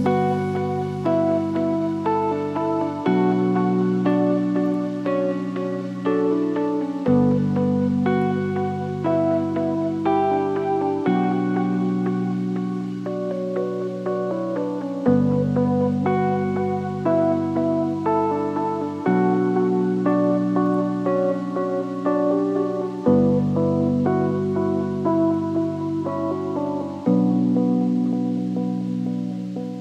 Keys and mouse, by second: 0.8 space, 2.8-4.1 drag, 4.4-5.0 drag, 5.9 drag, 6.6-9.2 drag, 9.4 click, 10.6 click, 13.5 click, 14.9-15.2 drag, 15.7 drag, 16.3 click, 17.8-18.2 middle drag, 22.4-23.5 shift+drag, 24.3 click, 25.0 middle click, 26.1 middle click, 28.7-29.1 middle drag, 29.1-29.8 middle drag.